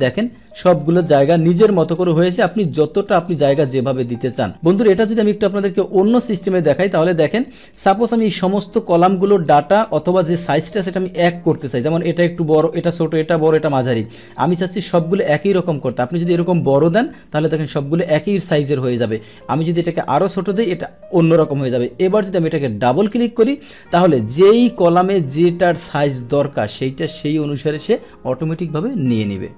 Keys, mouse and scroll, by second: 0.4 click, 1.3 click, 2.4 click, 3.0 click, 3.2 click, 3.8 click, 4.9 click, 6.6 click, 6.9 click, 8.1-9.4 drag, 14.3-16.5 drag, 18.8-20.0 drag, 22.9 click, 23.0 click, 24.3 click.